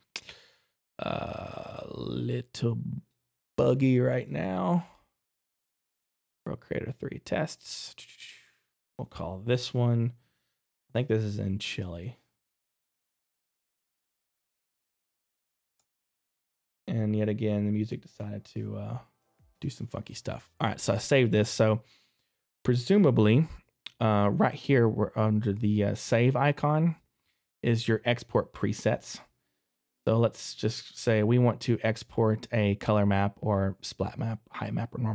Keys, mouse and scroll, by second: 10.8-13.1 typing, 14.8-15.4 typing, 15.8 Return, 17.7 click, 21.0 middle click, 26.8 click.